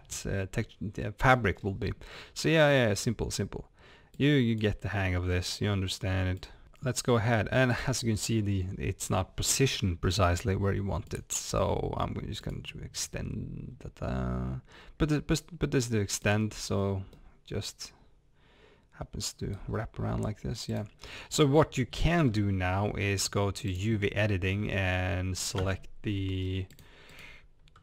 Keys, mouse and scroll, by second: 1.3 scroll down 1, 1.6 scroll up 1, 2.7 click, 6.4 click, 12.5 drag, 16.1-16.8 drag, 16.8 scroll down 1, 17.1-20.8 middle drag, 19.7-20.3 scroll up 2, 20.3-20.8 scroll down 2, 20.8 click, 21.0 scroll down 2, 25.6 Tab, 26.4 scroll down 1, 26.8 click.